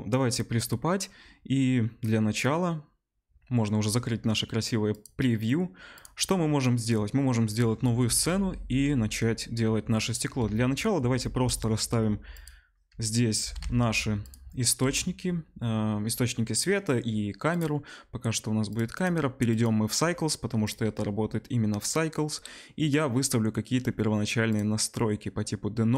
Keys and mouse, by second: 1.0-5.9 middle drag, 5.9 click, 6.0-13.9 middle drag, 8.0 a, 8.3 Delete, 10.2 KP_1, 11.2 shift+a, 13.4 g, 14.8 KP_0, 15.0-17.5 middle drag, 17.5 click, 17.6-19.0 middle drag, 19.0-24.5 drag, 24.5-25.9 middle drag.